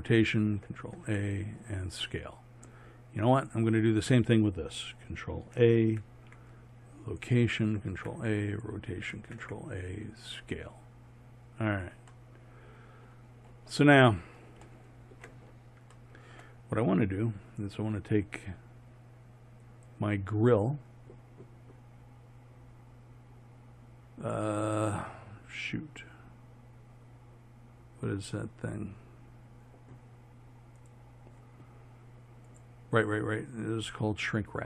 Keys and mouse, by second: 0.8 ctrl+a, 3.3 click, 5.9 ctrl+a, 7.9 ctrl+a, 9.2 ctrl+a, 12.3-19.7 middle drag, 19.7-21.7 drag, 22.5-34.6 middle drag.